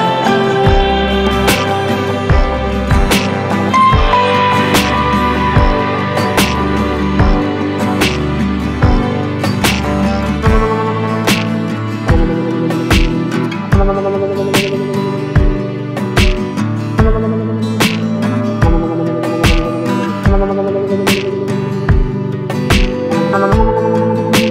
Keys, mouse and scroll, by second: 0.7-14.4 drag, 14.4-17.6 drag, 17.6 Delete, 19.7 ctrl+space, 21.8 click.